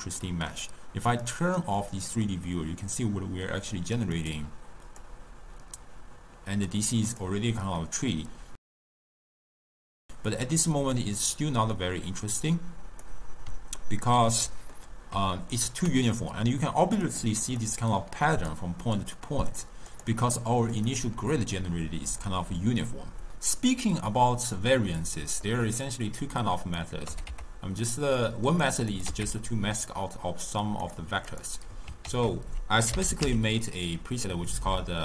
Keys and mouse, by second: 0.3-1.3 middle drag, 1.3 click, 1.9-4.6 middle drag, 4.6 click, 5.1-7.3 drag, 7.9-8.8 middle drag, 9.2 ctrl+middle click, 9.5 click, 9.9-10.9 ctrl+middle drag, 10.9-13.8 drag, 13.8-16.4 ctrl+middle drag, 16.4-20.1 typing, 17.1 click, 17.6 click, 18.4 click, 18.9 click, 19.5 click, 19.9 click, 20.8 click, 24.9-26.3 middle drag, 26.3 click, 27.1 g, 28.2-28.7 middle drag, 28.7 click, 29.0 click, 29.6 x, 30.9 click, 31.3 click, 32.1 ctrl+a.